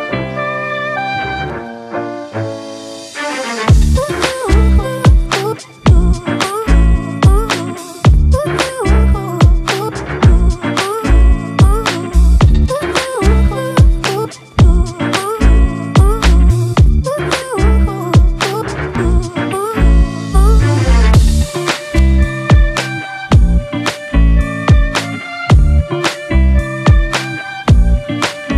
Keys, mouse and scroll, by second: 1.1 Return, 2.7 ctrl+t, 8.6 Return, 24.2 ctrl+t, 25.1 alt+shift+click.